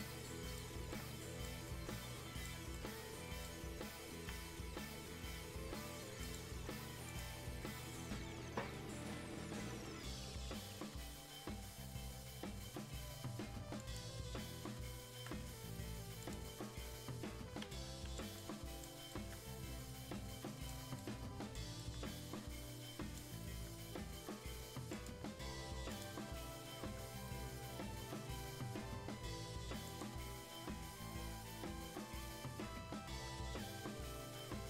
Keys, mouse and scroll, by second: 0.0-1.6 alt+right drag, 1.6 right click, 2.7-6.2 alt+right drag, 6.2 click, 13.7 click, 16.2 click, 17.7 right click, 18.3-24.9 alt+right drag, 24.9 click, 31.1 click.